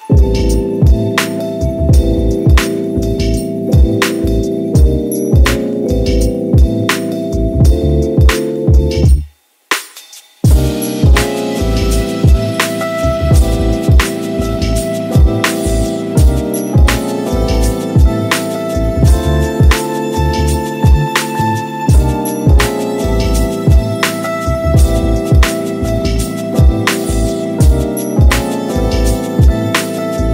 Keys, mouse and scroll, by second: 1.1 ctrl+v, 5.3 e, 8.4-10.1 middle drag, 11.0-14.2 drag, 14.2 ctrl+z, 17.3 click, 18.2 ctrl+a, 19.1 right click, 20.0-22.2 middle drag, 22.2 g, 24.8 click, 25.1-25.9 middle drag, 25.9 click, 26.2-28.2 middle drag, 28.2 shift+d.